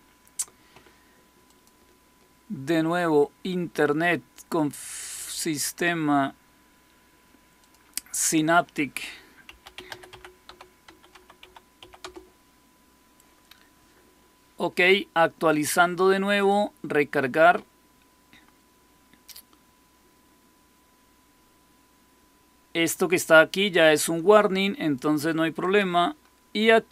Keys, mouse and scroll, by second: 1.3 click, 7.5-9.3 drag, 9.1-12.2 typing, 16.3 click, 23.8-24.9 drag, 25.5 click.